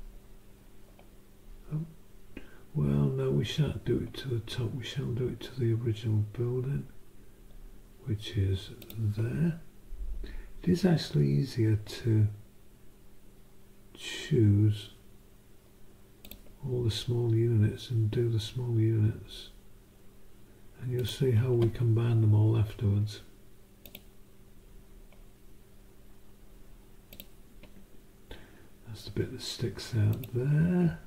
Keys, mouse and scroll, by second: 8.8 click, 16.2 click, 21.0 click, 23.8 click, 27.1 click, 30.1 click.